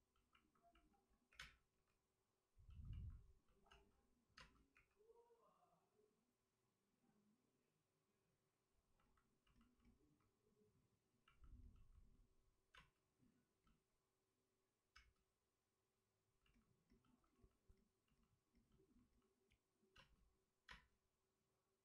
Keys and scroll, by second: 1.2 3, 1.3 space, 1.6 3, 3.6 space, 4.6 space, 4.6 3, 9.5 3, 12.7 space, 14.9 space, 19.9 space, 20.7 space.